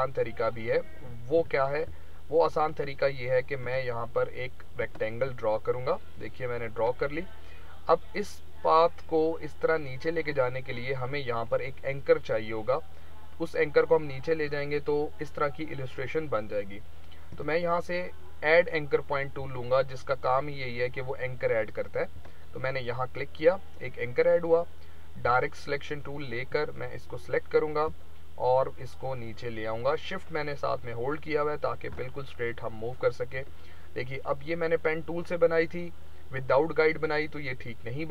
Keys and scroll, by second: 1.4 v.